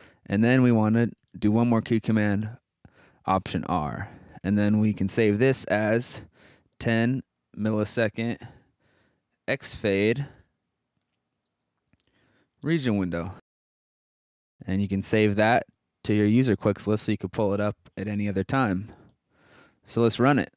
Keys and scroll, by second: 2.4 alt+r, 4.4 BackSpace, 6.1-10.4 typing, 11.4-13.6 typing.